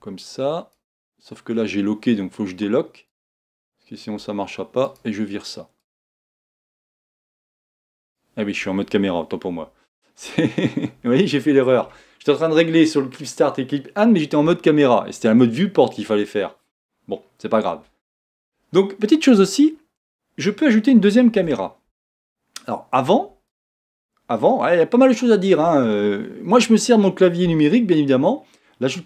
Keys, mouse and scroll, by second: 3.2 click, 4.8 click, 5.8-8.8 drag, 9.6 KP_0, 11.3 shift+middle click, 11.8-14.8 shift+scroll up 1, 21.3 shift+a.